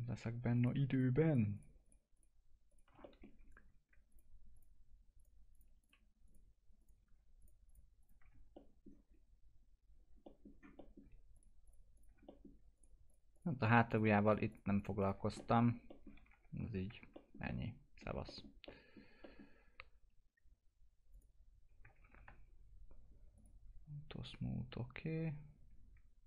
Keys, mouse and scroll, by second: 0.6 click, 3.0 alt+middle click, 4.1 ctrl+click, 8.5 middle click, 9.1 scroll up 1, 10.2 middle click, 10.5-10.8 scroll down 1, 10.8 middle click, 11.3 ctrl+click, 12.3 middle click, 12.8 ctrl+click, 15.2 scroll down 1, 16.3 F4, 17.1 middle click, 21.1 click, 22.0 ctrl+z, 23.4 click.